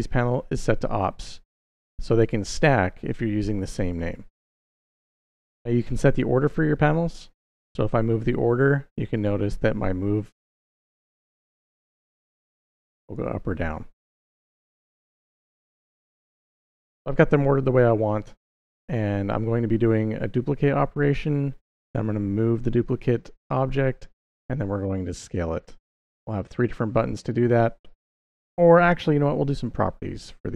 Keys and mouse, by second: 7.3 click, 9.0 click, 11.1 click, 12.6 click, 12.8 click, 14.3 click, 14.8 click, 16.4 click.